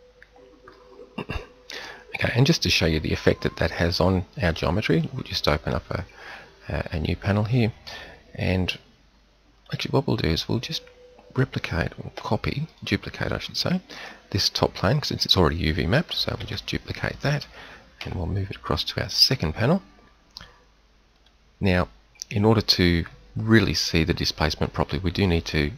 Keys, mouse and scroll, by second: 12.1 a, 16.3 shift+d, 17.9 m, 21.0 click, 21.5-23.4 drag.